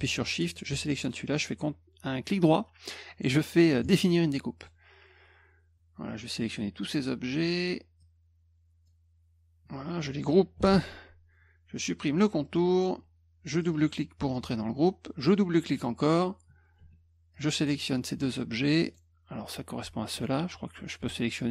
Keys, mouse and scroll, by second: 0.5 shift+click, 1.0 right click, 3.8 click, 4.6 click, 6.4 click, 8.0 click, 12.4 middle click, 13.6 click, 13.7 click, 14.3 click, 15.2 click, 15.3 click, 15.7 click, 17.3 shift+click, 18.9 click, 20.1 click.